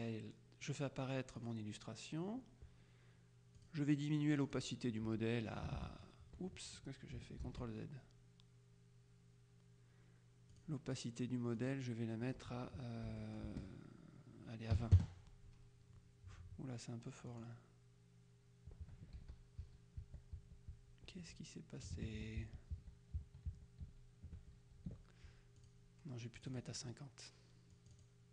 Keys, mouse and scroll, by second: 1.5 click, 3.7 click, 4.5 click, 5.9 ctrl+z, 7.5 ctrl+z, 10.6 click, 11.7 click, 13.1 Delete, 13.5 BackSpace, 14.8 KP_2, 15.0 KP_Enter, 17.4 click, 19.3 ctrl+z, 22.5 shift+z, 25.7 click, 26.5 click, 27.9 click.